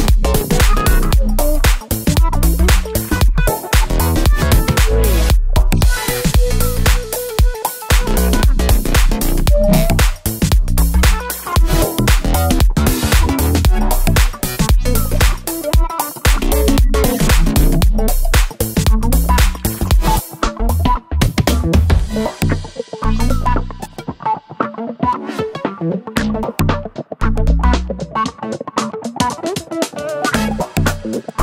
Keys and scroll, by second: 7.2 d, 17.2 BackSpace.